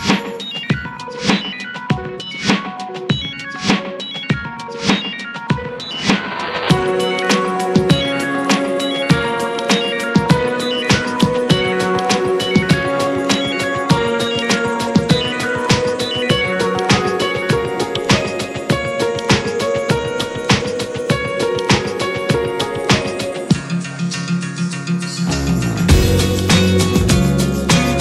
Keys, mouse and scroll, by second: 1.7 scroll down 5, 2.3-3.0 middle drag, 3.0-3.4 scroll up 2, 3.4 click, 4.0 shift+drag, 4.2 shift+drag, 4.6 shift+click, 5.2 shift+click, 5.4 scroll down 2, 5.6-6.3 middle drag, 6.3 click, 7.8 click, 9.1-9.9 middle drag, 9.9 scroll up 1, 10.1-11.2 shift+middle drag, 11.2 click, 11.9 drag, 12.1 scroll up 2, 12.5 middle click, 12.8 scroll up 1, 13.1-14.8 shift+middle drag, 14.8 ctrl+s, 15.4 drag, 15.8 s, 16.9 shift+middle click, 17.4 ctrl+s, 17.5 ctrl+click, 18.6-19.4 drag, 20.4 drag, 20.9 shift+middle click, 21.3 drag, 21.9 middle click, 22.5 click, 22.9 F4.